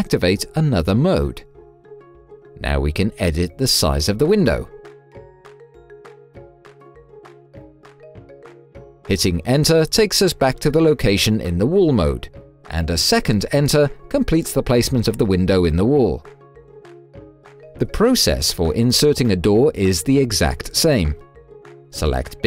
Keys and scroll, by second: 8.9 Return, 12.6 Return.